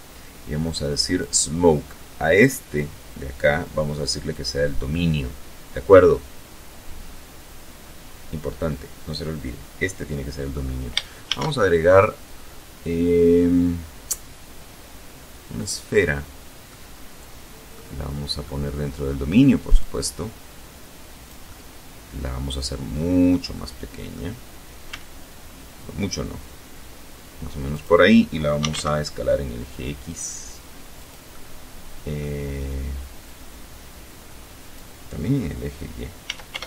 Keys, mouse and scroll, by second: 2.9 click, 9.9 shift+a, 14.2 click, 15.3-16.5 middle drag, 17.1 middle click, 18.4-20.1 drag, 20.1-22.1 middle drag, 22.1-22.9 scroll up 1, 23.5 s, 26.3 click, 27.0-27.8 typing, 29.6 click, 29.9-31.0 middle drag, 31.8 click, 34.8 s, 35.1 y.